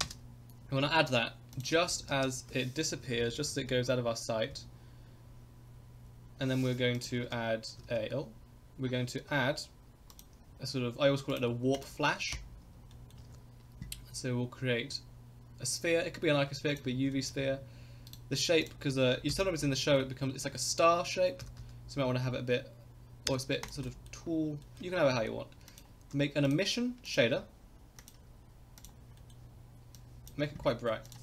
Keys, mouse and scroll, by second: 0.1 space, 1.5 click, 1.7 space, 2.2 space, 3.0 Right, 3.2 Right, 3.3 Right, 3.5 Right, 3.6 Right, 3.8 Right, 4.5 Left, 6.9 click, 7.2 shift+a, 7.8 shift+a, 10.1 click, 11.3 click, 11.7 click, 12.3 KP_0, 12.9 middle click, 13.2 shift+a, 17.1 shift+middle drag, 17.5-18.1 scroll up 1, 18.1 right click, 18.1 scroll up 1, 19.3 KP_Decimal, 19.8 middle click, 20.0-20.3 scroll down 2, 20.4 middle click, 21.4 s, 23.9 middle click, 24.6 middle click, 25.6 click, 26.4 click, 27.0 click, 28.0 click, 29.2 middle click, 29.9 click, 31.0-31.2 drag.